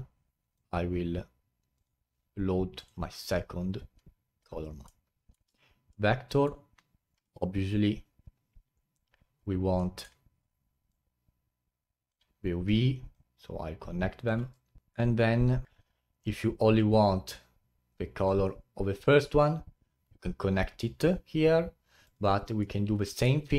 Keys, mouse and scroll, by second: 4.0-4.6 scroll down 8, 4.8-10.9 middle drag, 10.9 click, 13.1-14.8 drag, 14.8 middle click, 15.7 scroll up 1, 16.7-19.8 drag.